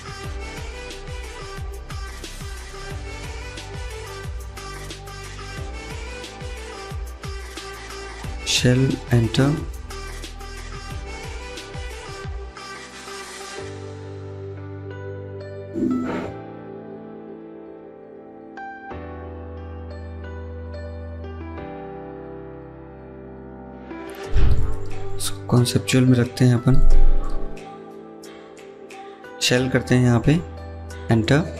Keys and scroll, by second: 0.1 ctrl+z, 5.3 ctrl+z, 10.4 Escape, 10.6 Escape.